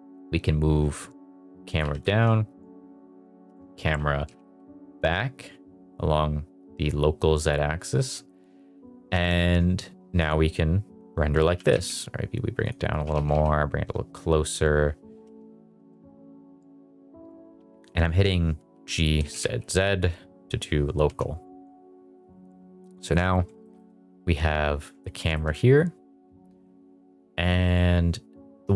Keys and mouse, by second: 1.6 click, 1.8 g, 2.0 z, 3.4 Escape, 3.8 g, 4.2 z, 4.4 z, 8.1 click, 11.4 g, 11.7 z, 12.6 click, 12.9 s, 13.1 z, 13.3 z, 15.2 Escape, 15.6 g, 15.9 z, 16.0 z, 17.7 click, 18.7 g, 19.1 z, 19.3 z, 21.0 Escape, 23.6 shift+middle click, 25.2 shift+middle click.